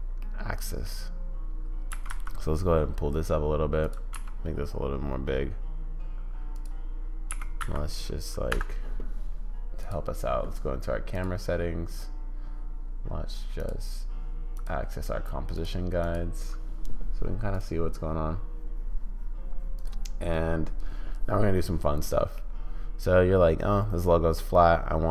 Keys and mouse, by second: 0.3 middle click, 1.9 g, 4.1 s, 7.3 g, 9.8 click, 13.6 click, 14.6 click, 15.5-16.1 drag, 22.3-25.1 middle drag.